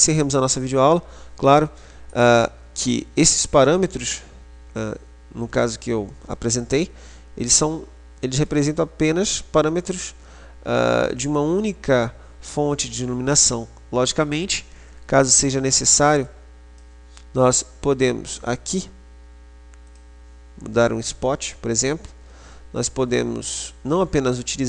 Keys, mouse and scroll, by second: 2.3 right click, 5.6-8.3 middle drag, 10.9-12.9 middle drag, 14.6 click, 16.4 click, 20.1 click, 22.1 click.